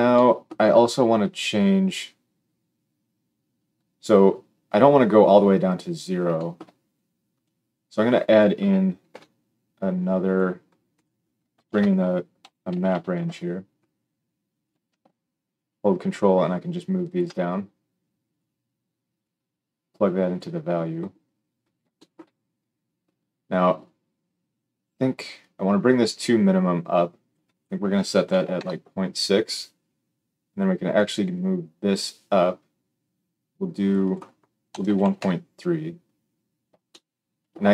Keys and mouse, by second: 9.0 g, 10.3-10.9 middle drag, 10.9 click, 11.0-15.6 middle drag, 11.6 shift+a, 15.6-37.7 ctrl+drag.